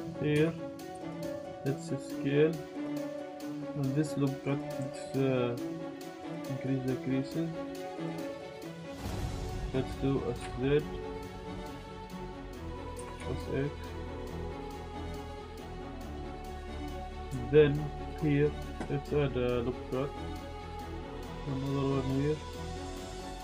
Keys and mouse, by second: 0.6 click, 0.9 s, 3.7 click, 6.4-7.9 drag, 8.2 middle click, 8.4 alt+shift+click, 8.6 middle click, 9.0 middle click, 9.2 middle click, 9.7 s, 9.7 z, 10.1 click, 10.4 s, 11.9 alt+Tab, 11.9 alt+click, 12.6 alt+shift+click, 13.0 s, 13.2 x, 15.1 z, 15.1 click, 15.2 z, 15.5 s, 15.6 x, 17.2 ctrl+z, 17.2 Tab, 17.2 ctrl+s, 17.5 shift+click, 18.1 ctrl+r, 20.8 click, 23.2 ctrl+z.